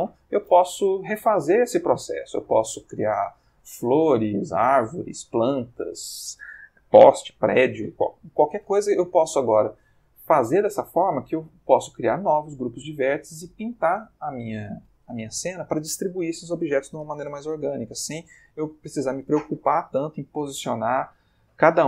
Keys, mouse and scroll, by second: 10.1-10.9 ctrl+middle drag.